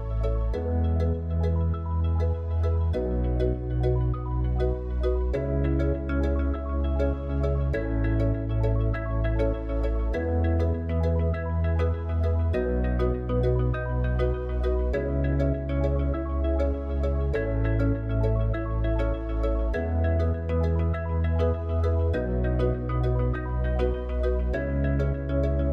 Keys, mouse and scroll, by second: 2.1 Tab, 4.0-6.0 drag, 6.0 Tab, 15.3 click, 18.6 click, 20.4 click, 22.4 click.